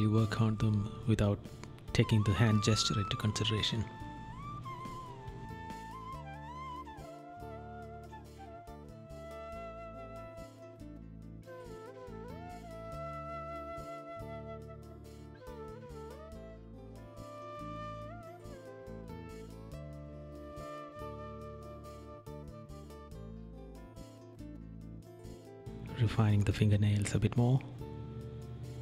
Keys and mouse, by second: 1.3 right click, 2.7 right click, 4.5 right click, 6.3 right click, 8.0 right click, 9.3 right click, 11.2 right click, 12.7 right click, 14.1 right click, 14.9 right click, 15.7 right click, 16.9 right click, 17.6 right click, 18.2 right click, 18.6 right click, 20.0 right click, 21.3 right click, 22.6 right click, 24.0 right click, 26.1 right click, 26.6 right click, 27.2 right click, 28.1 right click.